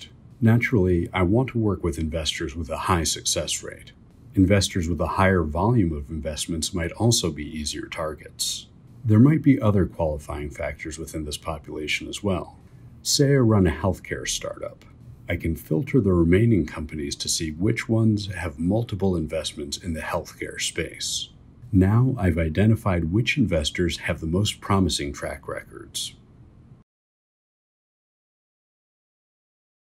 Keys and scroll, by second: 0.3 Escape, 0.6 1, 1.0 2, 1.9 3, 5.2 2, 5.9 3, 6.3 3, 9.3 BackSpace, 10.2 3, 18.2-20.9 typing, 25.2 Escape, 25.9 1, 26.4 2, 28.3 2, 28.7 1.